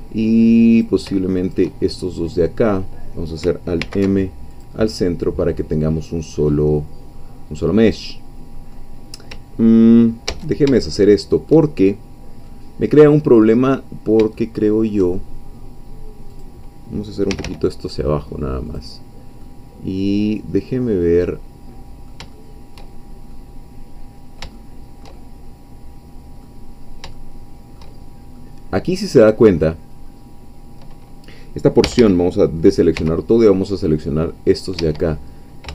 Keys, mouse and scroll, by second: 0.8 click, 1.3 shift+click, 1.9-3.4 shift+middle drag, 3.8 alt+m, 4.5 click, 5.5-5.9 scroll down 2, 5.9-8.9 middle drag, 10.3 ctrl+z, 11.0 shift+middle click, 11.7-12.1 shift+scroll up 2, 12.6 middle click, 13.7-15.5 middle drag, 16.4 click, 17.3 g, 18.7 click, 19.5-22.9 middle drag, 22.9-23.3 shift+scroll down 2, 23.4-25.2 middle drag, 25.3-26.6 shift+middle drag, 26.7 scroll up 2, 27.2-28.3 shift+middle drag, 28.5-30.1 middle drag, 30.1-31.8 scroll up 2, 31.8 a, 32.9 c, 33.5-34.8 drag, 34.8 Escape.